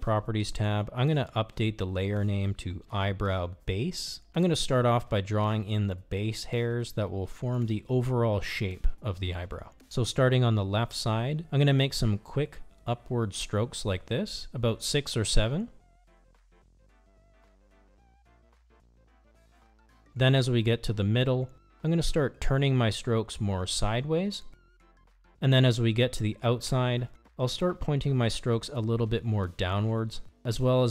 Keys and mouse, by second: 2.0 click, 3.3-9.9 drag, 13.5 click, 14.8 click, 15.9 click, 17.1 click, 18.1 click, 19.4 click, 20.5 click, 21.6 click, 22.7 click, 23.8 click, 24.7 click, 25.7 click, 26.8 click, 27.7 click, 28.7 click, 29.6 click, 30.6 click.